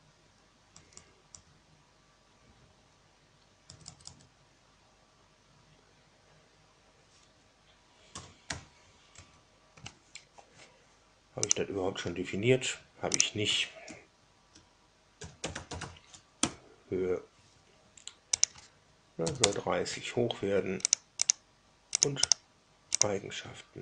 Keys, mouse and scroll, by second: 0.7 BackSpace, 0.9 BackSpace, 1.2 BackSpace, 3.6 BackSpace, 3.7 BackSpace, 4.0 BackSpace, 8.1 a, 8.4 r, 9.1 alt+Tab, 11.4 click, 13.1 click, 14.9-16.2 typing, 16.3 Right, 18.3 click, 19.1 KP_3, 19.3 KP_0, 20.8 click, 21.1 click, 21.9 click, 22.2 right click, 22.9 click.